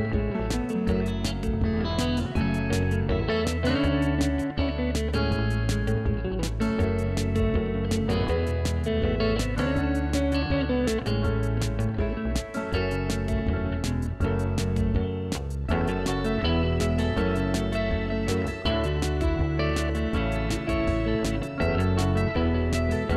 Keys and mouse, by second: 0.2 right click, 0.4 click, 2.4 ctrl+shift+x, 2.5 click, 5.8 2, 5.9 click, 8.3 click, 15.4 c, 16.2 1, 16.3 Return, 16.7 click, 17.2 a, 17.4 Escape, 17.4 click, 18.8 ctrl+1, 18.9 click, 19.1 right click, 19.3 click, 19.8 ctrl+shift+x, 20.1 ctrl+w, 20.3 click, 21.1 ctrl+1, 21.5 ctrl+q, 21.7 click, 22.0 ctrl+1, 22.1 click, 22.6 c, 22.8 Right, 22.9 Left.